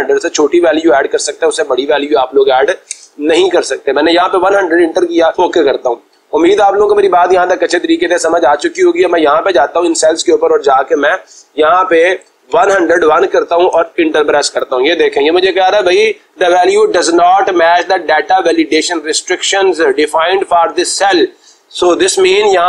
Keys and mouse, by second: 2.5-3.4 typing, 5.0 click, 8.4 click, 9.6 click, 11.5 1, 12.6-13.5 typing, 14.1 Return.